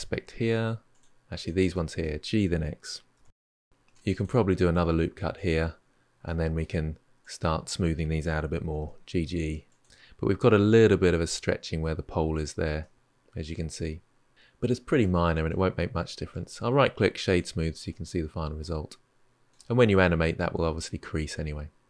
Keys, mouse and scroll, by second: 0.7 click, 1.2 shift+click, 1.5 middle click, 2.5 g, 3.7 ctrl+r, 6.0 middle click, 7.0 click, 8.4 g, 9.8-11.5 middle drag, 12.6-14.3 middle drag, 16.1-17.7 right drag, 17.7-20.7 middle drag.